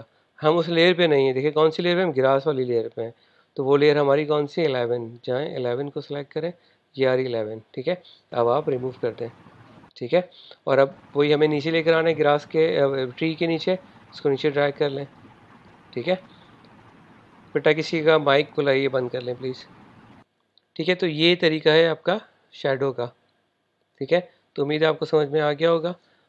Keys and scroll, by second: 9.3 BackSpace.